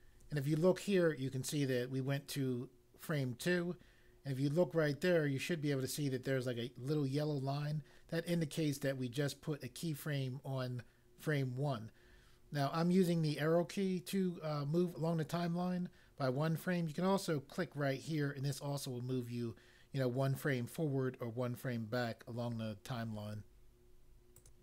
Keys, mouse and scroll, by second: 24.4 click.